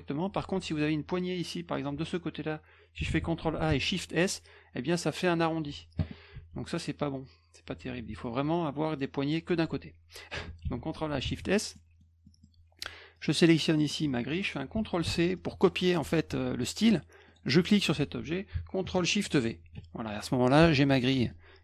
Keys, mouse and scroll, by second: 0.8-1.8 shift+drag, 3.0 ctrl+a, 3.7 shift+s, 6.3 ctrl+z, 7.6 ctrl+z, 10.6 ctrl+a, 11.2 shift+s, 11.7 middle click, 12.2 middle click, 13.1 click, 13.5 middle click, 15.0 ctrl+c, 15.4 middle click, 17.3 click, 19.5 ctrl+shift+v, 20.6 F1, 21.0 middle click.